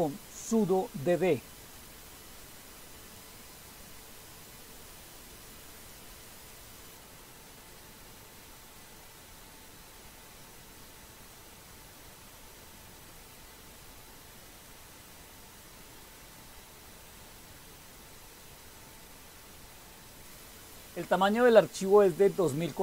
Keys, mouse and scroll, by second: 0.0-1.0 typing, 2.4-4.4 typing, 5.8-6.1 typing, 7.2-18.7 typing, 19.8-21.2 typing.